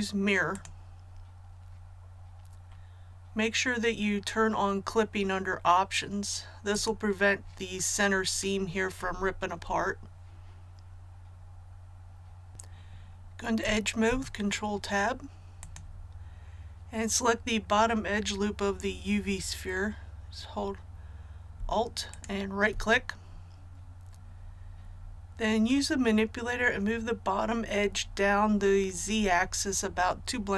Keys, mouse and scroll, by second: 14.0 Tab, 15.5-16.6 drag, 22.0 alt+right click.